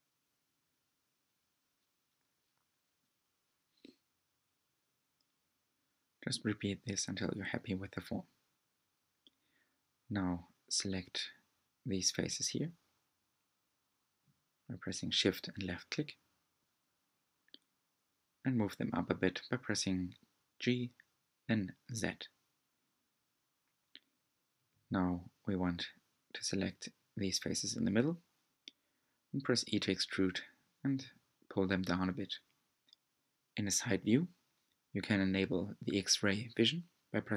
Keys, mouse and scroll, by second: 1.9-3.1 middle drag, 3.3 r, 6.2-8.3 middle drag, 8.3 3, 9.9 shift+click, 10.9 shift+click, 12.1 alt+click, 13.0 shift+click, 13.5 shift+click, 13.9 shift+click, 14.3 shift+click, 14.9 middle click, 15.9-16.5 scroll down 1, 16.5 middle click, 17.5 g, 21.6-24.1 middle drag, 24.1 click, 25.1 shift+click, 26.4 e, 31.2 click, 32.1 scroll up 2, 32.9-34.6 shift+middle drag, 34.6 alt+z, 35.4-36.5 scroll up 1, 36.5-37.3 scroll up 1.